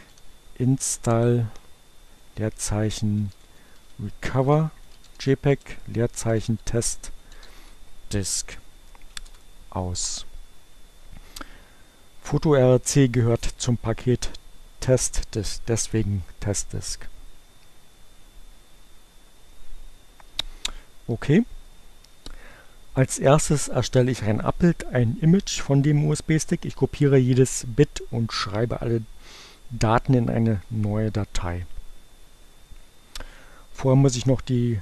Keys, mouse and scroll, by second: 0.0-0.5 typing, 1.8-8.0 typing, 8.4 Return.